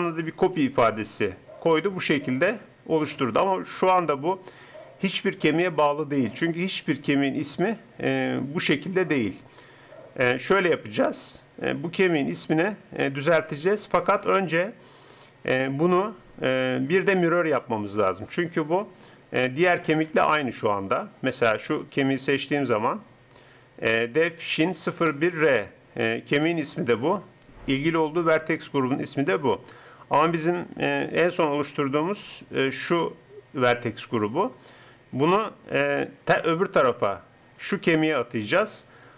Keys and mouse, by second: 12.0-13.8 drag, 17.6-22.0 middle drag, 22.0-23.9 drag, 31.1-34.7 drag, 37.7-39.1 drag.